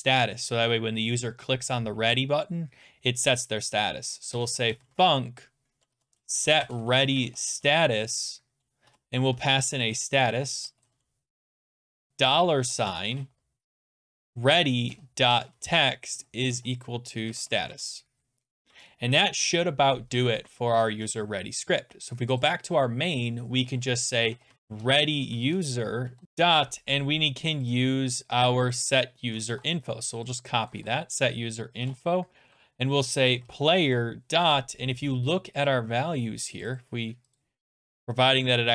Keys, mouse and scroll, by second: 4.1-18.2 typing, 20.3 ctrl+s, 22.4 click, 24.0-25.0 typing, 25.5 Tab, 26.2 Return, 27.8 click, 28.7 click, 28.9 click, 29.5 ctrl+c, 30.3 click, 30.7 click, 30.8 ctrl+v, 31.8-34.3 typing, 35.7 click, 36.6 click, 36.8 click, 37.4 click.